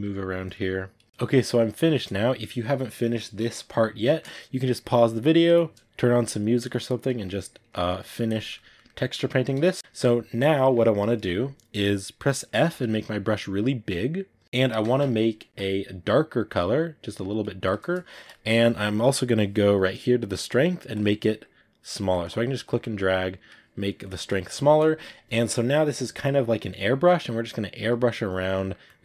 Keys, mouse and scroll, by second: 0.3 click, 1.0-12.5 ctrl+middle drag, 12.5 f, 14.4 click, 17.9-20.8 ctrl+middle drag, 20.8-24.5 drag, 24.5-26.4 ctrl+middle drag, 26.4 click, 26.6 middle click, 27.5 click, 28.4 middle click, 28.7-29.0 drag.